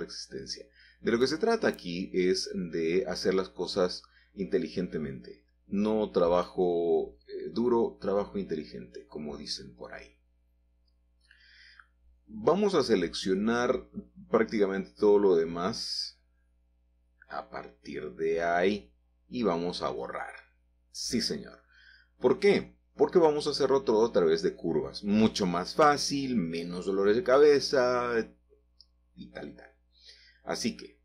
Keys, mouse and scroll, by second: 2.4 ctrl+z, 3.4-4.7 scroll down 3, 4.6 middle click, 5.1-5.8 scroll up 1, 7.1-8.4 scroll up 2, 8.6-10.1 middle drag, 12.9 middle click, 15.1-16.2 drag, 16.4-17.0 typing, 18.1 typing, 18.8 click, 21.0 x, 21.8 click, 23.9-25.1 scroll down 2, 25.1-27.1 middle drag, 30.3 shift+a.